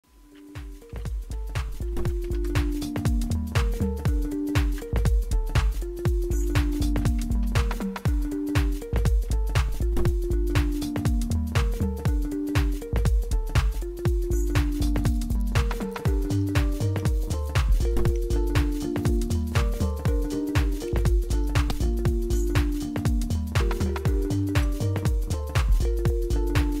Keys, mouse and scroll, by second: 1.8-2.8 typing, 4.2 Right, 4.2-5.0 typing, 4.8 Return, 6.5-10.5 typing, 15.7 Return, 15.8 Return, 16.0 Return, 16.4 Return, 21.4 Return.